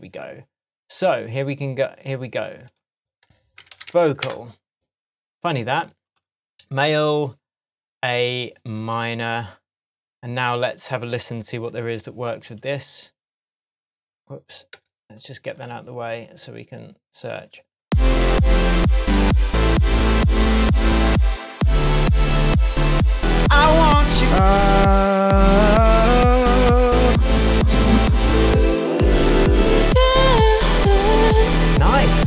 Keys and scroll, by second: 3.6 v, 4.2 Return, 14.7 BackSpace, 17.8 space.